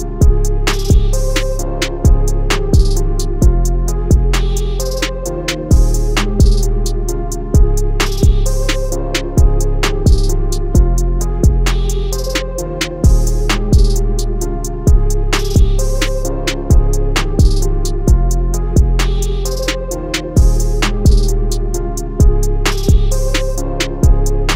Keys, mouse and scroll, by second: 4.3 alt+scroll down 1, 5.4 click, 8.3-9.0 alt+scroll up 2, 9.9 scroll down 1, 10.4 click, 13.4-14.3 scroll up 1, 14.4 click, 15.1 scroll down 1, 15.8 click, 17.3-18.2 scroll up 1, 18.2 click, 19.8 click.